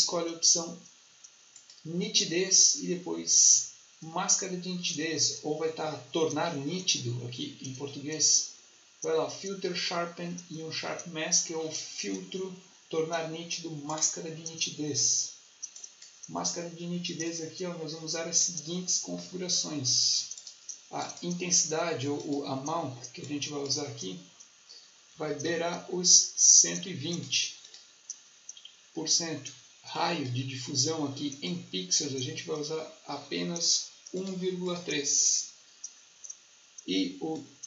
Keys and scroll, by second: 24.8-25.9 typing.